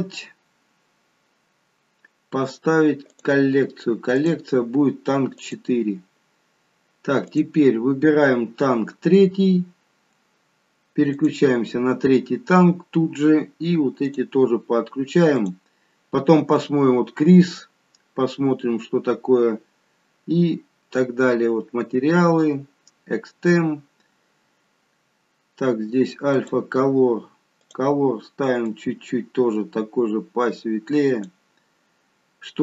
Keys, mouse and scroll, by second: 3.0 click, 4.1 click, 8.7 click, 9.6-10.2 scroll up 1, 10.2-11.0 scroll up 3, 11.1 click, 12.4-13.4 scroll down 1, 13.4-14.0 scroll down 3, 14.0 click, 15.4 click, 23.4-25.6 scroll down 1, 25.6-26.2 scroll down 2, 26.2 click, 27.6 click.